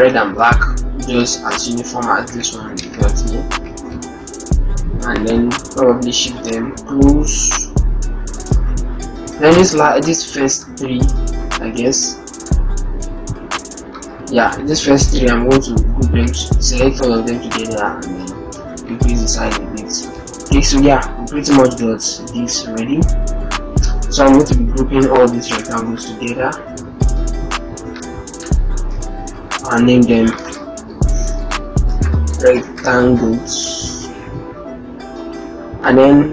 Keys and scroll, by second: 2.2 ctrl+Return, 3.4 ctrl+shift+Return, 3.5 ctrl+shift+Left, 14.6 ctrl+t, 18.6 ctrl+-, 18.9 ctrl+0, 19.5 ctrl+-, 28.7 ctrl+g, 31.7 shift+r.